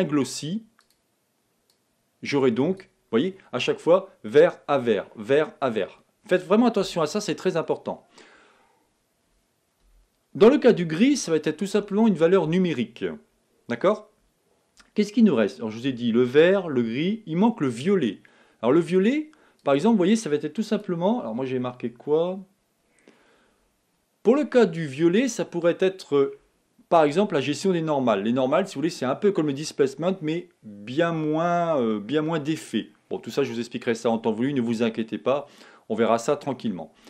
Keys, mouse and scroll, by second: 3.0 click, 19.9 click.